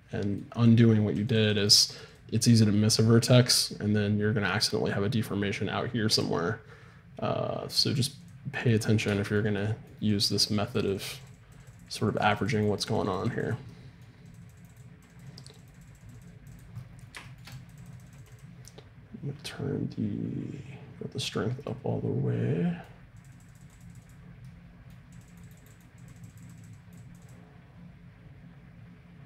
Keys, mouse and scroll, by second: 0.7-3.9 drag, 3.6-8.4 middle drag, 6.1-8.4 drag, 9.2-13.2 middle drag, 10.1-21.7 drag, 13.7 middle click, 23.2-29.0 drag.